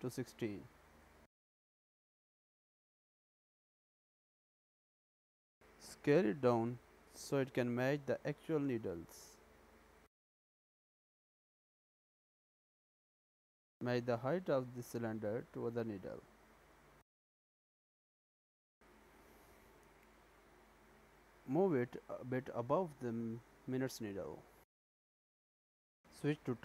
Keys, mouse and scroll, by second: 2.2 click, 3.0-4.7 scroll up 5, 4.7 shift+middle click, 6.5 s, 12.5 middle click, 14.5-15.2 scroll up 4, 15.4 shift+middle click, 16.1 s, 20.8 click, 21.6 g, 25.3 middle click.